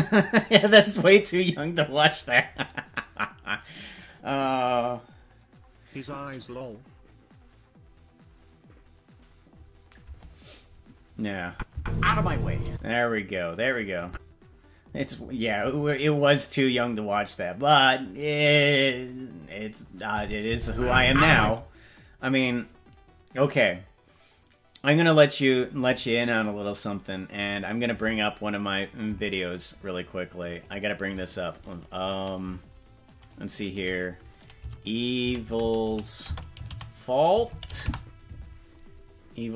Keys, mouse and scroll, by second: 11.5 click, 11.7 space, 12.6 space, 14.0 click, 20.2 click, 20.5 space, 21.4 space.